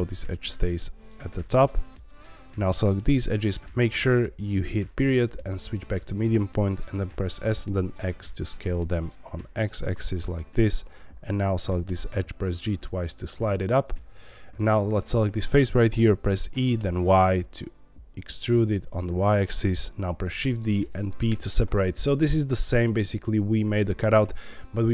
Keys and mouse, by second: 1.2 2, 1.4 click, 3.6 Escape, 3.6 s, 3.6 y, 3.6 x, 4.9 ., 7.2 s, 7.5 x, 10.1 click, 10.6 click, 11.6 g, 11.8 g, 13.8 click, 14.1 3, 14.9 middle click, 15.8 middle click, 16.2 e, 16.7 y, 19.3 click, 20.2 shift+d, 20.4 right click, 21.1 p, 21.6 Tab, 22.3 click, 22.7 click.